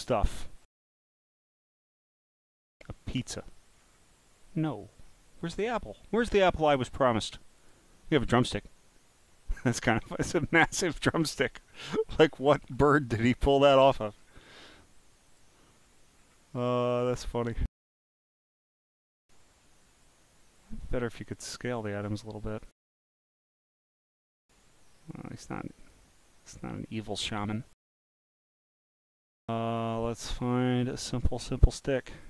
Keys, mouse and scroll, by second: 0.0 click, 0.6-1.2 scroll down 4, 1.4 scroll up 3, 2.4 click, 3.2 click, 3.7 scroll down 1, 5.0 scroll down 1, 5.7 scroll down 2, 7.6 click, 8.4-9.6 drag, 10.7-12.1 drag, 12.7 scroll down 1, 13.1 click, 13.8-14.3 scroll down 9, 15.3 click, 15.8-16.4 scroll up 10, 16.8-18.3 scroll down 2, 18.3-18.8 scroll up 9, 20.4 click, 22.0-22.4 scroll down 1, 23.7 click, 24.6 click, 25.8 click, 26.9 click, 28.5-29.4 scroll down 8, 29.9 scroll up 4, 30.5-31.1 scroll up 6, 32.0 scroll up 2.